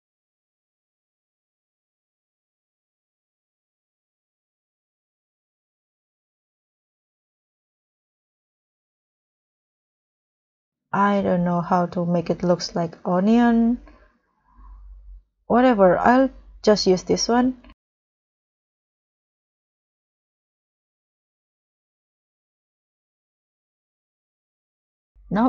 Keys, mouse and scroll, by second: 2.4 double click, 12.6-13.0 scroll down 4, 13.0-13.4 scroll up 2, 13.4 scroll down 1, 17.8-18.7 scroll down 1, 18.7 scroll down 1, 18.7-19.2 scroll up 4, 19.7 scroll up 1, 19.8 scroll down 4, 20.1-21.2 scroll up 8, 23.2 scroll down 1, 23.6 scroll up 1, 24.1 scroll up 1.